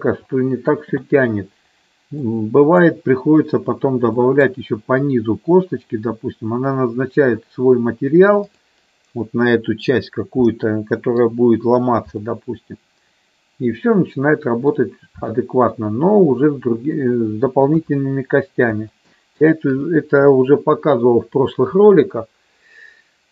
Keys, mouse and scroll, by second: 2.1 middle click, 4.3 middle click, 10.3 middle click, 12.3-14.7 middle drag, 15.4 shift+middle click, 17.9 KP_1, 19.0 shift+middle click.